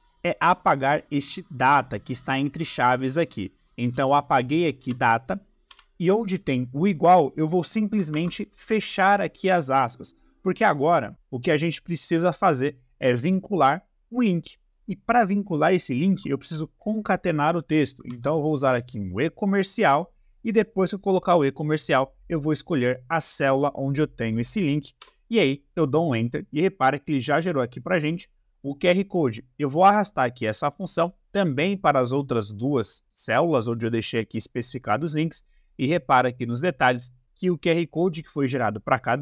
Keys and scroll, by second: 3.8 BackSpace, 8.1 shift+`, 18.0 shift+7, 24.9 Return.